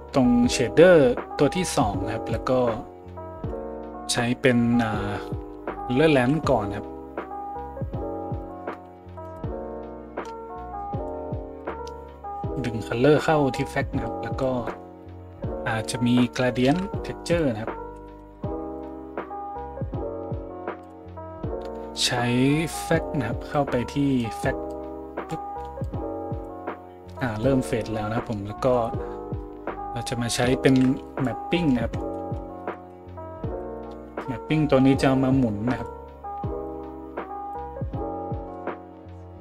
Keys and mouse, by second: 1.6-11.7 drag, 6.1 shift+a, 11.7 middle click, 12.5-20.9 drag, 16.7 shift+a, 20.9-23.6 middle drag, 23.6-35.8 drag, 30.7 shift+a, 33.6 p, 35.8 middle click, 36.7-39.4 drag.